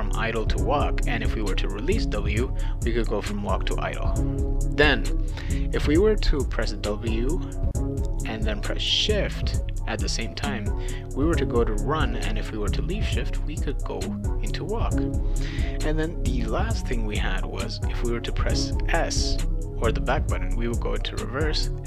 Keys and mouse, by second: 2.6 click, 11.1 click, 11.7 click, 13.2 click, 18.6 click, 19.2 click, 21.6 click.